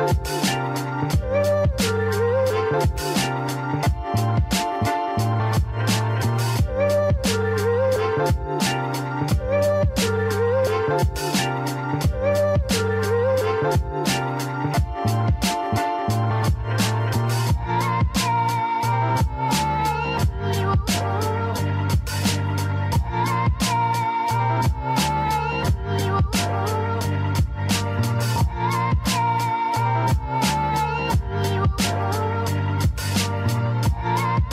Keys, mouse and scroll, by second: 6.6-24.7 drag, 27.7 alt+Num_Lock, 29.7-34.5 alt+right drag.